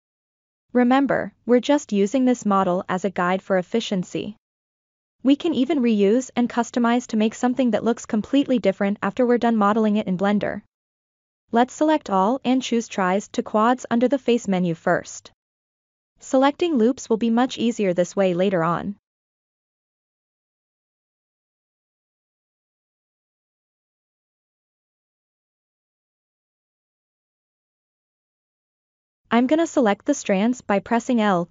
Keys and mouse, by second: 0.1-1.6 middle drag, 1.8 click, 2.8 click, 3.9 ctrl+z, 4.3 middle click, 5.7 click, 6.6-8.3 drag, 8.8 ctrl+z, 9.3-10.7 middle drag, 11.1 shift+middle click, 11.7 a, 13.0-15.1 drag, 16.3-17.1 middle drag, 17.3 click, 19.3-22.1 middle drag, 23.8-26.2 middle drag, 27.0 3, 27.2-28.3 middle drag, 29.8 l, 30.4-31.4 middle drag.